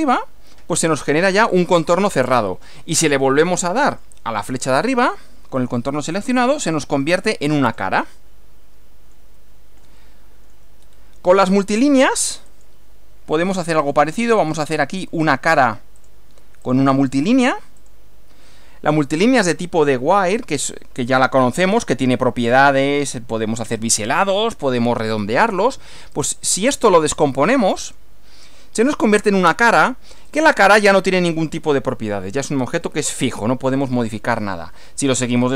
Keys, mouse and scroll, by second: 3.9 click, 6.2 click, 7.6 click, 8.0-10.7 middle drag, 10.8 shift+scroll down 1, 12.4 click, 13.8 click, 14.4 click, 14.8 click, 15.2 click, 16.0 click, 16.6 click, 17.8 click, 19.1 scroll down 1, 20.5 shift+middle click, 26.1 click, 27.8 click, 30.3 click, 35.4 click.